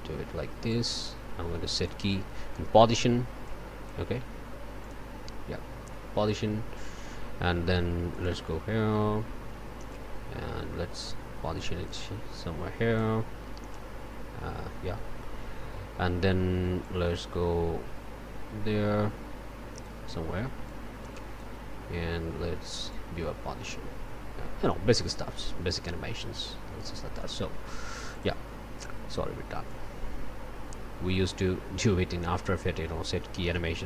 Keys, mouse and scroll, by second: 0.7 right click, 1.7 click, 3.4 click, 4.8 click, 8.1 click, 9.9-13.1 drag, 19.1 click, 20.6 click, 22.9-26.4 drag, 27.1 right click, 28.1 click, 29.6-33.8 drag.